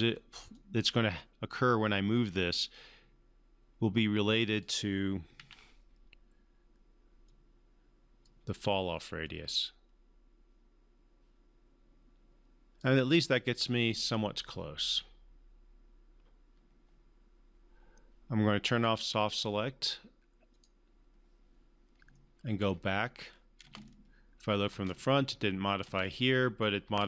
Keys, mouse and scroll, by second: 0.5-4.9 drag, 5.4 ctrl+z, 7.2 click, 7.3-8.5 drag, 18.7 click, 22.1-22.8 alt+middle drag, 23.6 space.